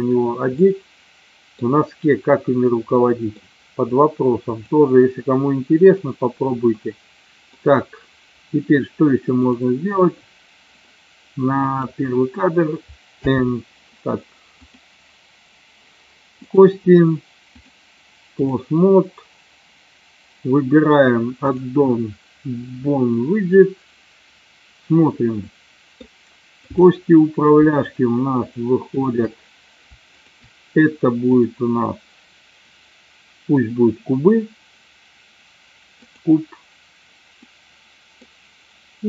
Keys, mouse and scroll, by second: 0.7-1.6 middle drag, 3.0 middle click, 4.6 click, 6.8-7.6 middle drag, 9.6 click, 11.7 click, 13.2 n, 14.8-15.9 drag, 16.6 click, 17.7 click, 25.5-26.0 middle drag, 26.7 click, 27.9-28.4 shift+drag, 28.5-28.9 shift+drag, 29.1 shift+click, 30.2-30.7 shift+drag, 31.4-36.5 drag, 37.5-38.3 middle drag.